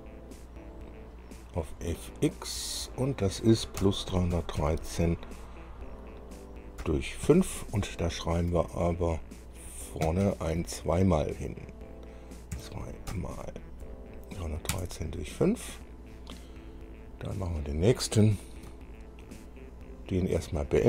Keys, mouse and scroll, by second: 1.9 click, 3.1 click, 4.0 KP_Add, 4.3 KP_3, 4.8 KP_1, 4.8 KP_3, 7.0 KP_Divide, 8.0 KP_5, 8.5 Left, 8.5 Left, 8.7 Left, 9.2 Left, 10.2 Right, 10.4 Right, 10.8 Left, 12.7 KP_2, 13.3 KP_Multiply, 14.9 KP_Enter, 20.6 click.